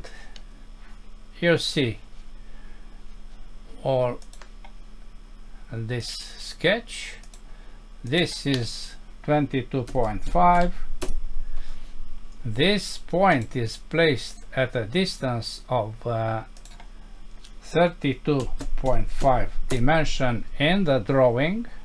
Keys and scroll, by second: 11.0 Return, 19.7 Return.